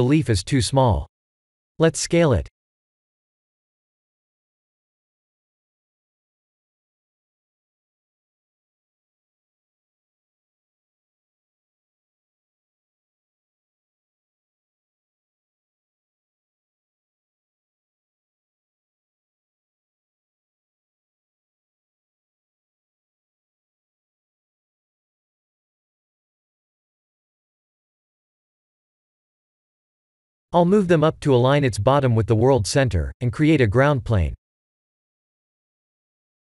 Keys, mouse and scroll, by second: 4.0 click, 4.9 KP_1, 6.3-6.6 scroll up 3, 8.5 shift+click, 9.2-10.7 middle drag, 11.3-12.3 middle drag, 12.8 click, 13.4 KP_3, 13.5 middle click, 13.8 KP_1, 13.9 middle click, 14.5-15.1 scroll down 2, 15.1 s, 17.4 r, 19.4 click, 19.6-20.7 middle drag, 20.9-21.2 middle drag, 21.4 KP_3, 21.8 KP_1, 23.1 click, 23.6 r, 24.9-25.6 middle drag, 25.8 click, 26.2-29.2 middle drag, 29.4-29.8 scroll down 2, 29.9-30.4 middle drag, 30.6-31.7 scroll up 4, 31.7-32.3 scroll down 3, 32.4-34.3 middle drag, 35.1 click, 35.4 b, 36.2 KP_1.